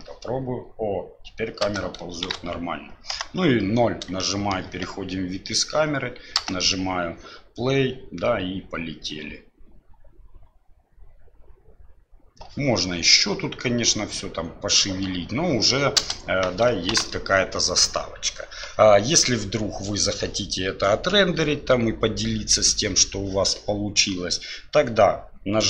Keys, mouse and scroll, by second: 1.6 space, 2.3 shift+Left, 3.1 KP_0, 4.2-4.6 shift+middle drag, 6.4 space, 16.0 space, 16.9 shift+Left.